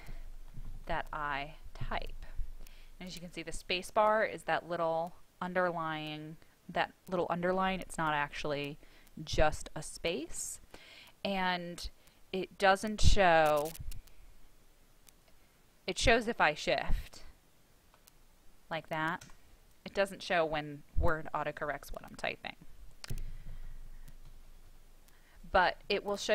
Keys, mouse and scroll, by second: 0.0-2.3 typing, 13.0 shift+i, 14.4 BackSpace, 16.8 shift+i, 19.6 space, 22.2-24.9 typing.